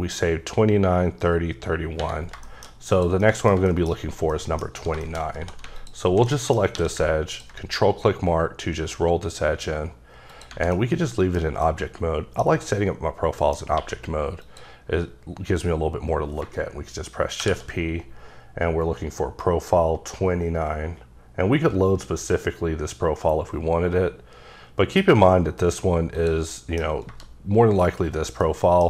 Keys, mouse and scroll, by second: 2.5 middle click, 2.7 scroll up 1, 2.9 click, 3.2 middle click, 3.7 shift+middle click, 4.0 scroll up 2, 4.3 middle click, 5.0 shift+middle click, 5.3 2, 5.8 alt+click, 6.3 middle click, 6.8 q, 7.3 ctrl+click, 8.1-8.5 scroll up 5, 10.3 click, 10.7 middle click, 11.4 scroll down 3, 11.6 middle click, 12.5-13.4 scroll up 2, 13.4 middle click, 13.8 q, 14.4 click, 17.4 shift+p, 18.3-24.0 scroll up 18, 26.2 click, 26.5 middle click, 26.8 scroll down 3, 28.1-28.5 scroll up 3, 28.5 middle click.